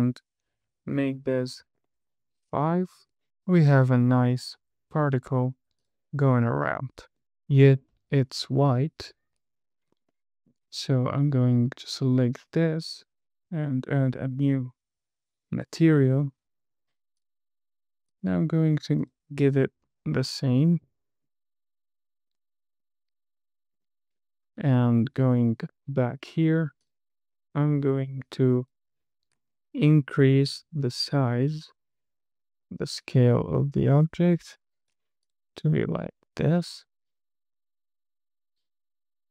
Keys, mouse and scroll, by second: 0.0-2.4 drag, 5.7 space, 6.1 click, 7.5 space, 7.8 scroll down 3, 8.2 middle click, 9.4 KP_1, 9.9-10.3 scroll up 1, 10.6 shift+middle click, 11.8 click, 16.4 click, 17.5 click, 20.2 space, 22.7 space, 23.1 space, 24.1 space, 25.3 middle click, 25.8 click, 27.2 click, 29.0 click, 29.7-30.8 scroll down 5, 31.3-32.4 scroll down 4, 33.3-35.3 drag, 35.6 click, 35.9 space, 36.5-37.0 scroll down 3, 37.0 space, 37.6 space.